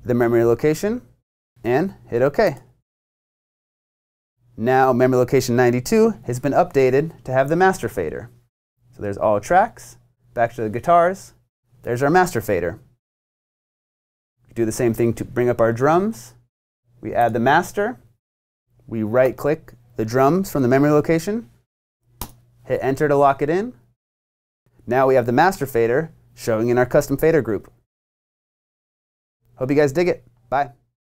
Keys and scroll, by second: 22.2 Return.